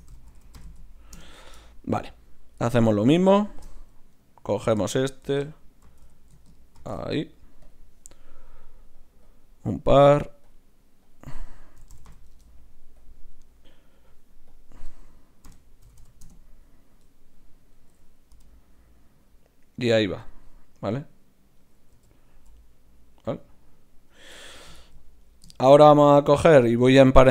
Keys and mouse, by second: 2.6 Tab, 3.0 z, 4.2-5.8 right drag, 5.9 ctrl+shift+x, 7.7 ctrl+shift+c, 9.0-17.4 drag, 17.4-18.4 right drag, 17.7-21.0 middle drag, 18.4 click, 18.4 g, 22.0 KP_3, 22.3 g, 25.2-27.3 drag, 26.7 Tab.